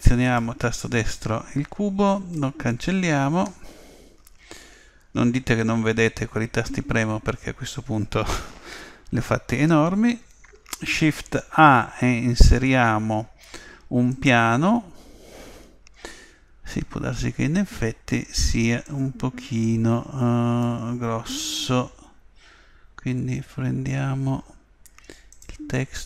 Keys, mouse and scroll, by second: 0.3-2.1 right drag, 2.4 Delete, 10.1 shift+a, 18.9 click, 25.3 click.